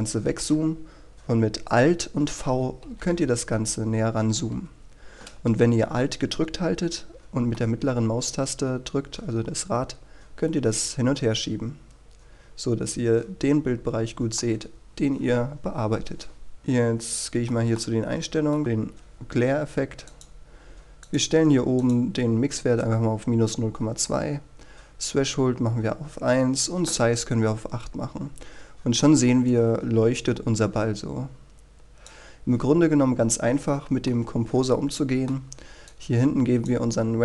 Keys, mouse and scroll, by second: 7.6-14.4 alt+middle drag, 16.4 scroll up 1, 16.5-20.3 middle drag, 20.4-21.1 scroll up 1, 21.1-22.1 drag, 28.4-28.8 scroll down 1, 29.0-29.5 scroll up 1, 29.7-30.9 scroll down 1, 31.7 click, 33.6-34.1 scroll down 1, 34.1-34.4 scroll up 1, 34.4 scroll down 1, 34.7-35.2 scroll up 1, 35.2-36.8 middle drag, 37.0 click.